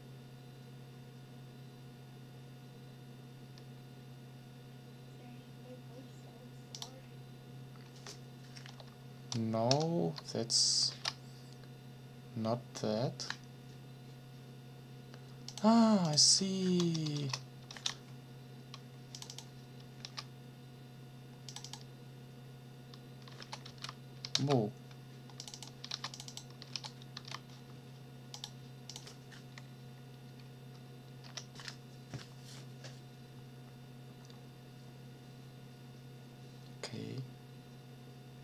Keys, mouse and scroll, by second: 6.7 click, 9.7 shift+0, 10.9 ctrl+s, 15.5 click, 16.0 click, 17.0 BackSpace, 17.7 ctrl+s, 19.1 click, 20.0 ctrl+c, 21.5 click, 23.4 ctrl+v, 23.7 ctrl+s, 24.3 ctrl+z, 25.4 click, 25.9 ctrl+c, 26.1 ctrl+click, 26.7 ctrl+v, 27.1 ctrl+s, 28.3 click, 30.2 Up, 31.2 Return.